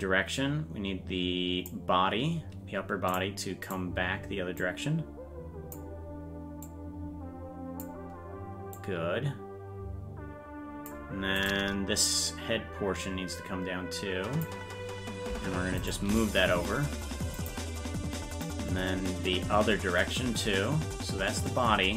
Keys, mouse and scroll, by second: 3.2 right click, 4.5-5.7 drag, 4.5 right click, 6.6-7.8 drag, 8.7-10.8 drag, 11.4 right click, 12.0-14.4 drag, 15.8 right click, 16.0 g, 18.4-21.9 drag.